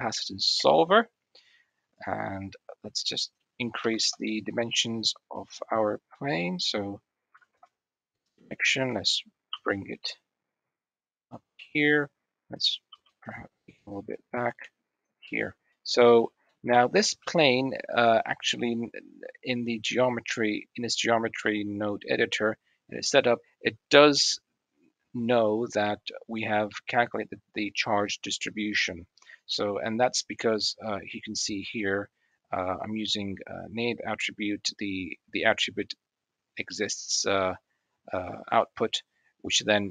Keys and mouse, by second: 1.5 click, 2.8-4.0 drag, 4.4-7.4 drag, 8.4 click, 9.2 g, 11.2-12.2 middle drag, 12.7 g, 14.8 click, 16.1 click, 16.8 shift+middle drag, 17.5 middle click, 18.1-18.7 middle drag, 19.9-21.5 drag, 22.8 middle click, 23.7 middle click, 25.4-25.7 middle drag, 25.7 click, 28.5-28.9 drag, 29.5 click, 30.6 click, 31.3 click, 39.6 click.